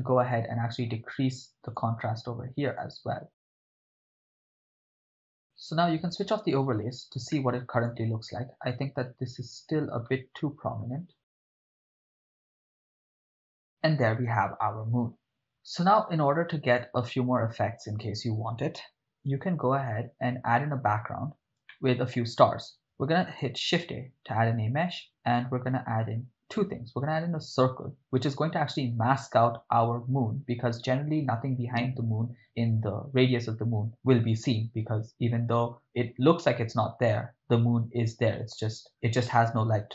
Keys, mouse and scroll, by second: 1.7 click, 2.7 click, 4.8 ctrl+middle click, 5.1 ctrl+middle click, 6.2 click, 7.5 shift+middle click, 10.1-10.9 ctrl+middle drag, 11.2 click, 11.2 click, 11.4 ctrl+shift+middle click, 11.4 click, 11.5 click, 12.0 click, 12.4 ctrl+middle click, 12.5 ctrl+middle click, 12.7 click, 13.1 ctrl+middle click, 13.4 ctrl+middle click, 13.5 ctrl+shift+middle click, 16.8 click, 21.9 shift+middle click, 23.2 shift+a.